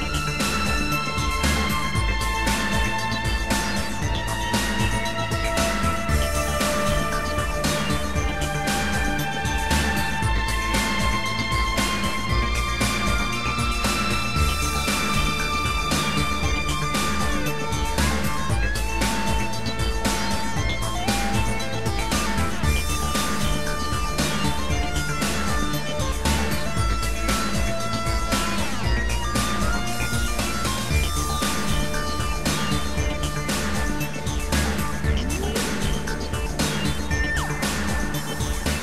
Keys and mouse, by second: 1.8 shift+click, 3.1 shift+click, 5.4 shift+click, 6.5 shift+click, 9.1 shift+click, 11.9 shift+click, 16.7 shift+click, 20.0 shift+click, 20.5 shift+click, 24.5 click, 25.3 click, 26.3 click, 28.7 click, 29.5 click, 30.0 click, 31.7 right click, 31.7 click, 33.0 click, 33.0 right click, 35.5 click, 37.9 click, 37.9 right click.